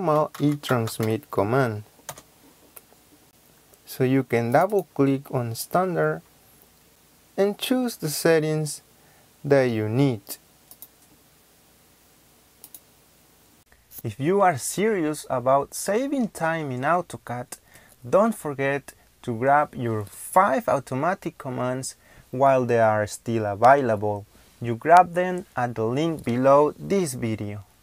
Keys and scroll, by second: 0.0-1.5 typing, 2.0 Return.